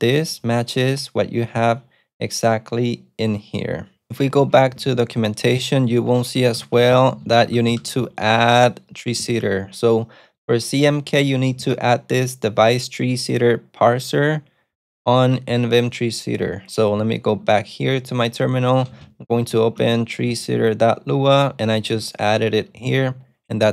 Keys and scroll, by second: 0.8 alt+super+F8, 4.5 ctrl+shift+F19, 6.0 super+f, 6.1-8.6 typing, 17.3 super+Tab, 18.9-20.3 typing, 20.4 Return, 21.6-22.5 typing.